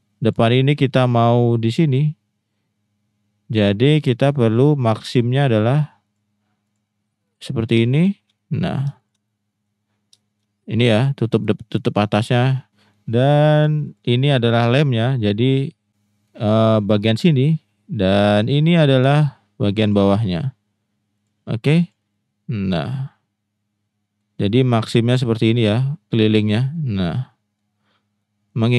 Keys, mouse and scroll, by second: 0.3-6.1 drag, 8.3 middle click, 9.0 shift+click, 9.2 middle click, 10.3 shift+middle click, 12.7 middle click, 13.2 middle click, 16.2 middle click, 18.1 middle click, 19.0 shift+middle click, 19.9-21.1 shift+drag, 21.8 shift+click, 22.1-24.2 middle drag, 24.7 middle click, 25.5 middle click, 26.6 middle click, 27.1 middle click, 27.3 middle click, 28.3 middle click.